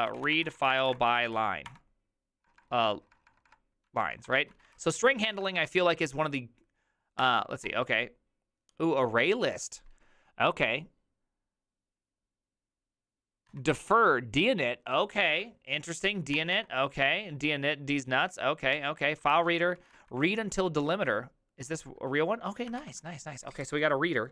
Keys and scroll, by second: 0.0-5.3 typing, 7.2 Tab, 7.6 Return, 13.5 Tab, 16.3 Return, 16.5 Return, 18.7 Tab, 19.3 ctrl+c, 19.5-20.4 typing, 21.7-23.7 typing.